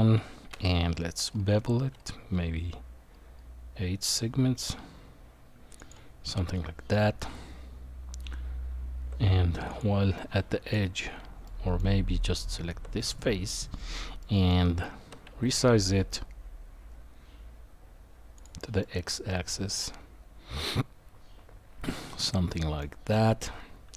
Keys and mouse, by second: 0.5 ctrl+b, 6.4 middle click, 7.3 Tab, 9.7 click, 10.2 middle click, 11.4 middle click, 12.3 Tab, 13.1 click, 14.2 middle click, 15.0 s, 18.8-22.8 middle drag.